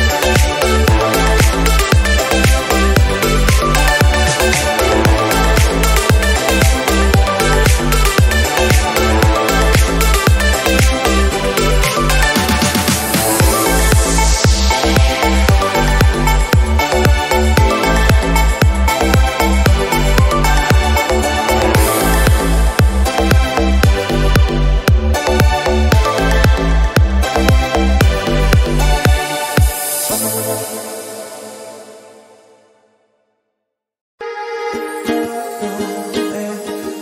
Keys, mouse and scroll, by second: 2.9-6.0 drag, 6.3 click, 11.3 s, 12.8 click, 13.5 r, 14.2 r, 15.7 g, 16.5 s, 17.4 middle click, 18.2 click, 19.2 KP_0, 21.6 KP_7, 21.9-22.3 scroll up 1, 22.3 r, 23.6 g, 26.9 shift+d, 27.4 scroll down 1, 27.7 r, 28.6 g, 30.5 r, 31.3 scroll down 5, 31.6 middle click, 31.8-33.0 drag, 33.3 s, 34.0-35.0 scroll up 3, 35.0-37.0 drag.